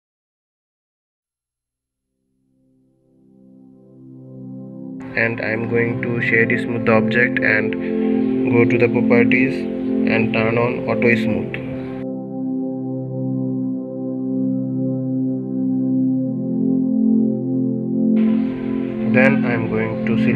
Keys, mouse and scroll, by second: 2.7 click, 3.2 middle click, 3.7 Tab, 4.3-5.8 middle drag, 5.8-7.4 right drag, 7.4-8.8 middle drag, 8.8-9.2 scroll down 3, 9.2-12.2 middle drag, 12.9-13.9 scroll down 6, 13.9 click, 14.6-14.9 scroll down 1, 15.4-16.4 drag, 17.1-17.9 middle drag, 17.9 scroll up 1, 18.3 click, 18.8 Tab, 19.3 scroll up 1, 19.4-20.3 middle drag.